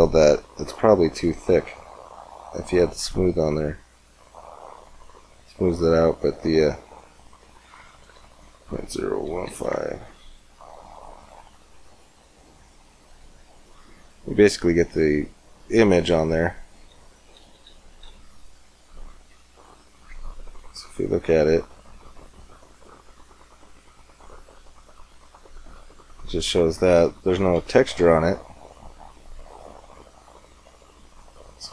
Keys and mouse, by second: 3.0-4.7 drag, 4.7 middle click, 7.0-8.9 drag, 8.9 middle click, 11.4-12.8 middle drag, 18.6 shift+z, 27.6 shift+z.